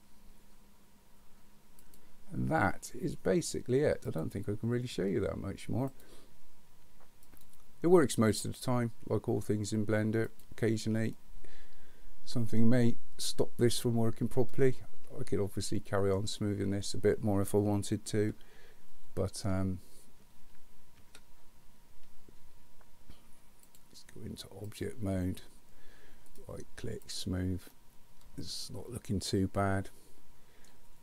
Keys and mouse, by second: 1.9 click, 4.1 click, 5.9-7.5 drag, 11.2-16.1 middle drag, 18.2 Tab, 21.0 Tab, 23.7-24.8 drag, 26.3 click, 27.7-30.6 middle drag.